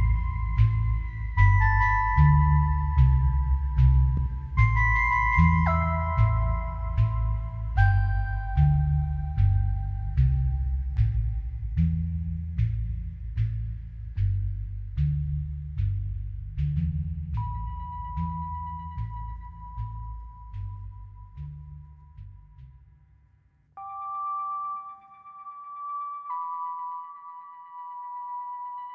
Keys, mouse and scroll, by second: 1.3 click, 2.1 click, 2.9 typing, 3.3 click, 4.1 click, 5.2 click, 6.2 scroll down 1, 6.4 click, 7.0 ctrl+y, 7.1 ctrl+t, 7.5-10.4 shift+drag, 12.9 typing, 13.1 click, 14.7 typing, 14.8 click, 15.5 ctrl+z, 15.6 click, 16.5 ctrl+z, 17.1 click, 17.8 ctrl+z, 18.1 click, 18.7 ctrl+z, 18.9 click, 19.9 click, 23.6 click.